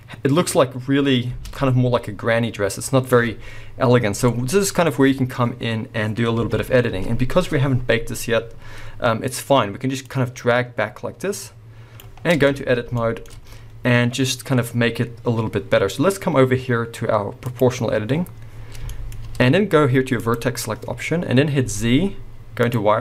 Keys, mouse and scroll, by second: 1.6 space, 4.2 scroll down 2, 6.4 KP_1, 7.0-8.1 scroll up 2, 8.1-9.4 scroll down 2, 9.4-10.1 scroll up 2, 10.1-12.4 drag, 12.2 scroll down 2, 12.4 b, 12.7 scroll up 2, 12.9-17.4 shift+middle drag, 13.3-15.7 scroll up 2, 15.7-17.4 scroll up 1, 17.4 click, 18.6-18.9 scroll down 1, 19.0-20.2 middle drag, 19.1-20.2 scroll up 2, 20.2 click, 21.0 scroll up 2.